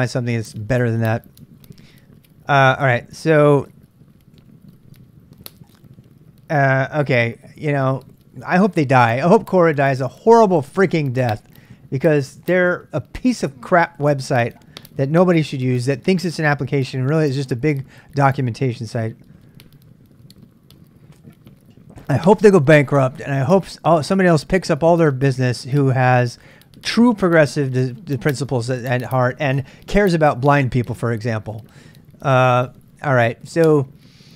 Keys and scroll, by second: 0.0-0.5 typing.